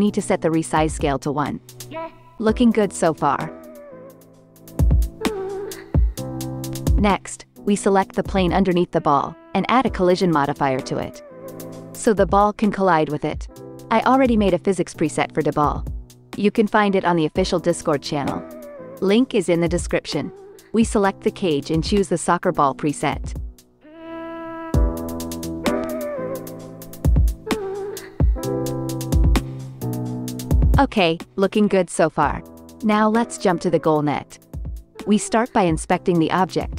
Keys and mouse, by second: 1.3 click, 6.6 click, 6.9 middle click, 7.0-9.7 drag, 9.7-15.2 middle drag, 11.4 space, 12.6 space, 12.9 space, 13.6 space, 14.2 shift+Left, 15.2 click, 15.5 middle click, 15.6-20.1 right drag, 20.1-26.2 middle drag, 22.9 space, 24.5 space, 25.1 space, 25.6 space, 26.0 shift+Left, 26.2-30.2 drag, 26.2 space, 27.7 space, 28.6 space, 29.1 space, 30.2 space, 32.9 shift+Left, 35.6 middle click.